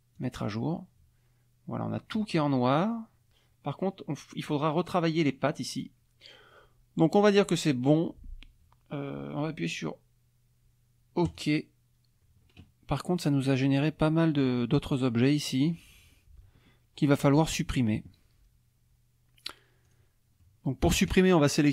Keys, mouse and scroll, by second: 0.2 click, 11.3 click, 19.9 click, 20.4 click.